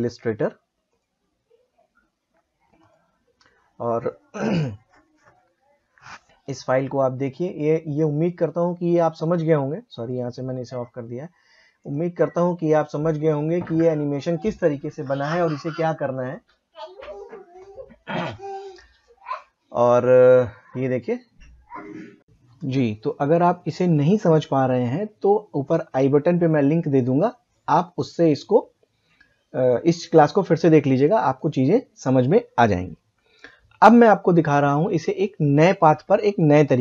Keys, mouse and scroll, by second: 4.2 typing, 7.2 click, 20.4 click, 22.5-34.6 drag, 35.5 click.